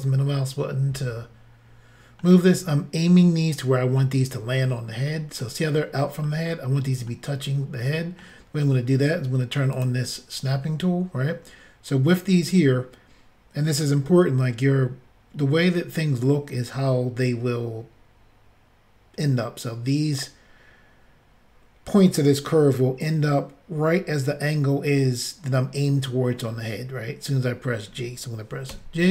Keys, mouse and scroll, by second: 4.7 middle click, 6.2 middle click, 7.1 middle click, 9.7 click, 9.8 click, 28.7 g.